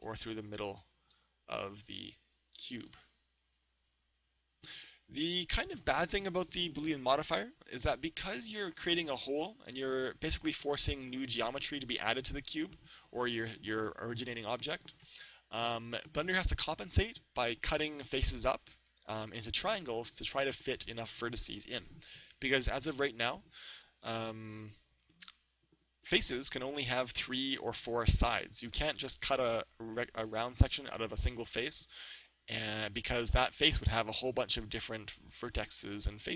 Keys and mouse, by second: 4.4-6.3 drag, 23.4-25.0 middle drag, 26.8-29.7 middle drag.